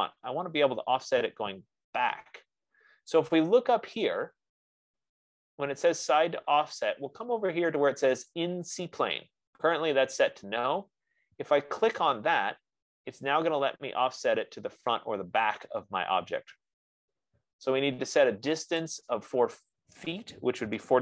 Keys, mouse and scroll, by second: 0.7-1.4 scroll, 12.3-17.3 drag, 19.3 click.